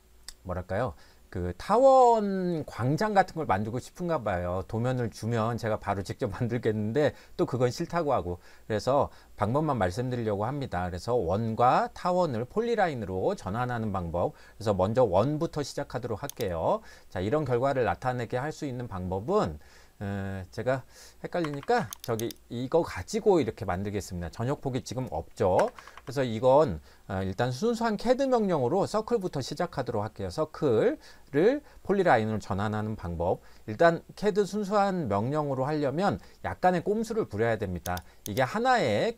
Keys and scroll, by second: 21.4 Escape, 21.6 Escape, 21.8 Escape, 25.6 Escape, 25.8 Escape, 26.0 Escape.